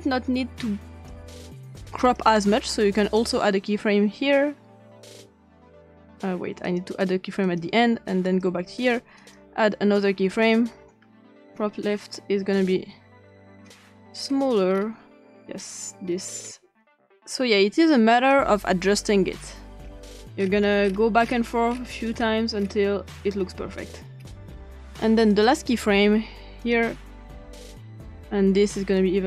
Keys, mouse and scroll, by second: 2.0 click, 2.4 click, 6.7 click, 7.4 click, 8.2 click, 9.2 click, 11.4 scroll down 2, 13.4 click, 14.1-14.8 scroll down 3, 16.1 scroll down 2, 18.2 click, 19.8 scroll down 2, 20.4-22.2 scroll up 8, 22.5 scroll down 2, 23.4-24.9 scroll down 3, 25.3 click, 26.6 click, 29.0-29.2 drag.